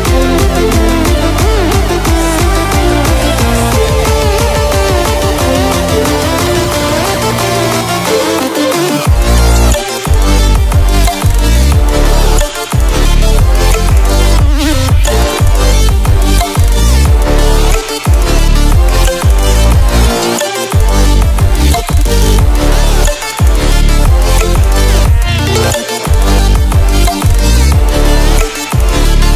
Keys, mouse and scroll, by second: 22.4-23.3 click, 25.4-26.0 click.